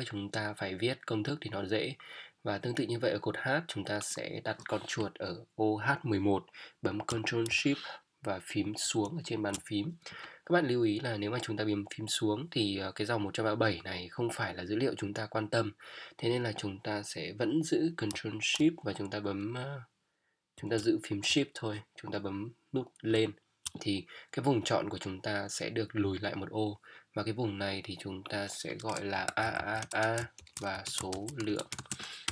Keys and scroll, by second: 8.8 ctrl+shift+Down, 23.1 shift+Up, 29.2 shift+a, 30.4-31.6 typing, 32.2 Return.